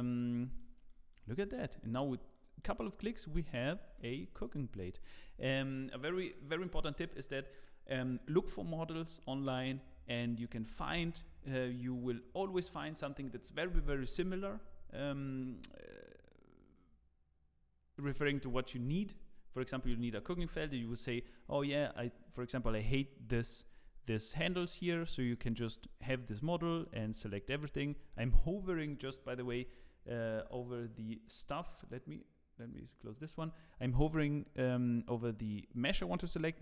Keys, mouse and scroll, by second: 0.2 Tab, 0.2 middle click, 0.2 z, 0.9 middle click, 1.4 ctrl+s, 1.6 middle click, 2.3 middle click, 2.7 scroll up 4, 3.1 shift+middle click, 3.1 shift+middle click, 3.9 g, 5.3-5.7 scroll down 4, 5.7 middle click, 12.4 click, 21.2 middle click, 21.7 scroll up 4, 22.2 middle click, 23.5 shift+middle click, 24.3 Tab, 24.6 scroll up 1, 24.9 middle click, 25.6 alt+a, 26.6 l, 27.0 l, 27.5 l, 32.2 l, 32.6 click.